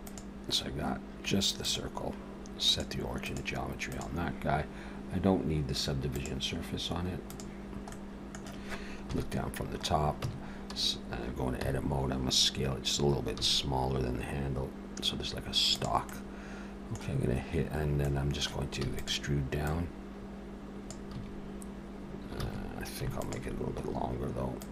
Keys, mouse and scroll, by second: 0.1 click, 1.6 click, 2.7 click, 6.1 click, 7.3 click, 7.9 middle click, 9.1 KP_7, 9.8 scroll up 2, 10.3 Tab, 11.6 a, 13.4 s, 16.1 middle click, 17.7-18.1 scroll down 2, 18.0 middle click, 18.8 e, 19.7 click, 21.0 a, 22.4 alt+a, 23.2 alt+shift+click, 23.9-24.2 scroll up 1, 24.6 click.